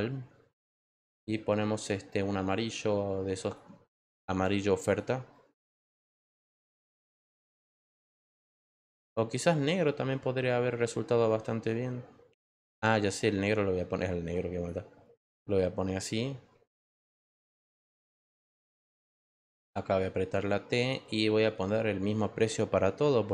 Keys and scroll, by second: 19.7 t.